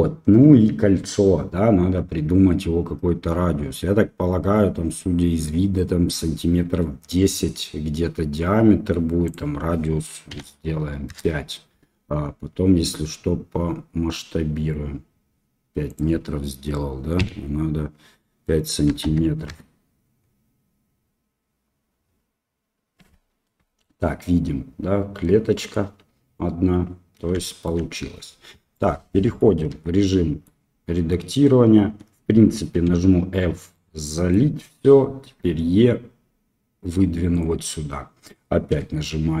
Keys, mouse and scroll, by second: 9.3-20.2 drag, 27.4 shift+middle drag, 28.7-29.4 middle drag, 29.7 Tab, 30.0 middle click, 32.8 f, 33.7 middle click, 35.3 e, 38.7 e.